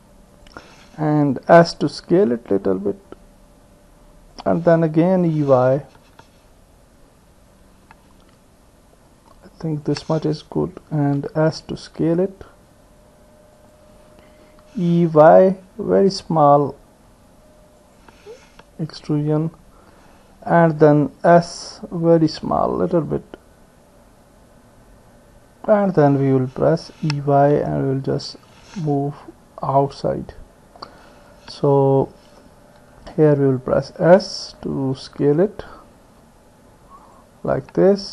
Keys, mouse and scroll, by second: 1.6 s, 5.2 e, 11.4 s, 14.6 e, 19.3-20.5 drag, 20.5 middle click, 21.5 s, 26.3 middle click, 26.4 click, 26.8 middle click, 26.8 e, 28.9 middle click, 29.0-30.8 drag, 32.9 s.